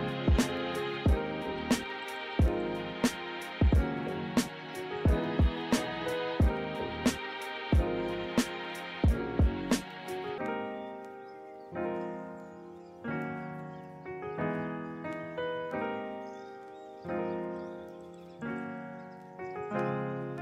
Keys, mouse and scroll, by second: 6.1 ctrl+-.